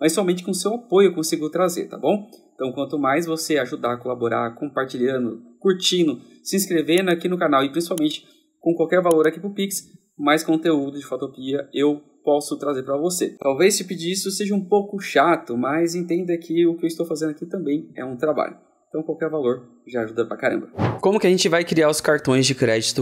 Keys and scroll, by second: 5.5-6.6 typing.